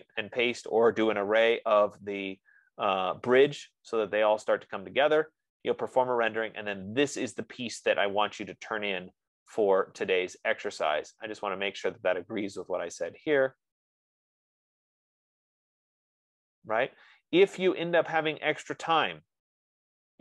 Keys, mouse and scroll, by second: 11.5 click, 12.5 middle click.